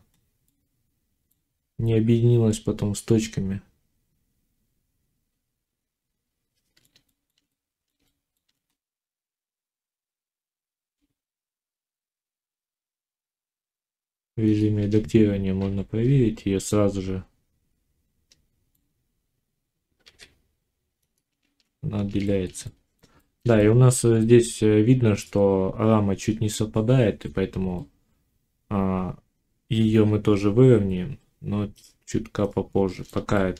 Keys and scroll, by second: 10.7 ctrl+j, 11.4 z, 13.3 Tab, 15.5 l, 19.9 g.